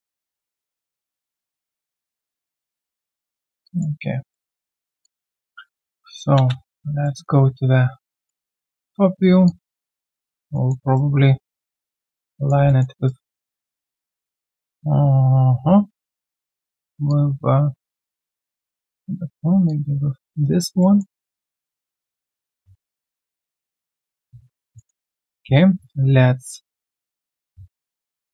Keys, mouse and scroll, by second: 1.2 alt+middle click, 1.5 alt+right click, 2.0 alt+middle click, 3.6 alt+click, 4.0 alt+scroll down 1, 4.3 alt+middle click, 5.0 alt+click, 6.3 space, 6.6 f, 7.0 alt+middle click, 7.4 alt+scroll down 1, 8.0 alt+right click, 8.5 alt+middle click, 10.5 alt+middle click, 10.8 alt+right click, 12.6 alt+middle click, 12.9 alt+right click, 14.2 alt+middle click, 14.5 alt+scroll down 1, 16.2 alt+right click, 18.5 alt+right click, 18.8 alt+middle click, 20.4 alt+right click, 20.8 alt+middle click, 24.4-24.7 alt+scroll down 1, 24.8 alt+middle click, 25.0 alt+right click, 26.1 alt+right click.